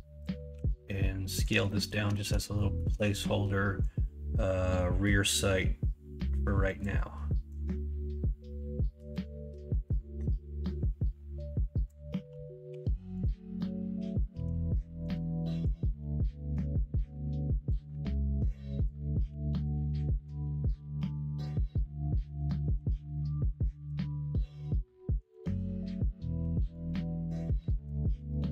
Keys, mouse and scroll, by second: 0.5 s, 1.6 middle click, 2.5 middle click, 12.7 2, 14.3 3, 15.7-19.8 drag, 19.8 middle click, 21.2 middle click, 22.2 alt+z, 22.7 alt+z, 23.1 middle click, 24.3 middle click, 26.3 ctrl+r, 27.5 3.